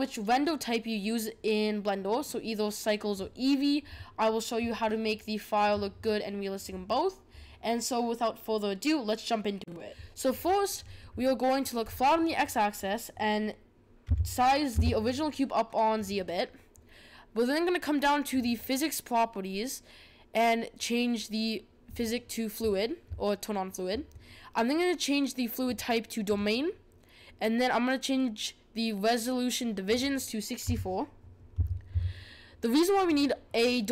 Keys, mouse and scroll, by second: 11.8 click, 14.1 s, 18.3 click, 21.9-24.9 drag, 25.6-28.7 drag, 29.8-32.9 drag.